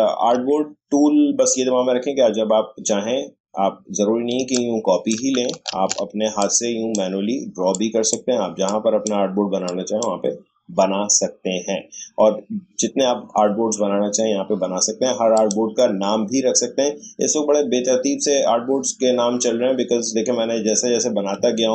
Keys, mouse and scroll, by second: 4.3 alt+scroll down 1, 4.5 alt+click, 5.7 ctrl+z, 6.4-12.6 drag, 15.3 click.